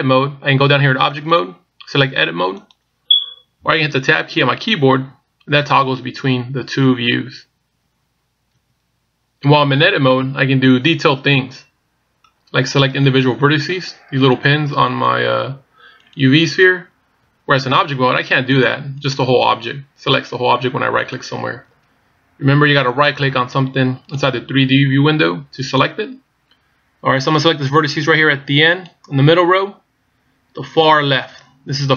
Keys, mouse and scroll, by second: 1.2 click, 3.1 click, 5.0 Tab, 5.7 Tab, 6.4 Tab, 7.1 Tab, 8.2 Tab, 8.7 Tab, 13.0 right click, 14.2 right click, 14.9 right click, 16.1 right click, 16.6 right click, 17.5 Tab, 17.9 right click, 18.6 right click, 19.0 right click, 21.5 right click, 22.1 Tab, 23.1 right click, 24.1 right click, 25.7 right click, 28.8 right click.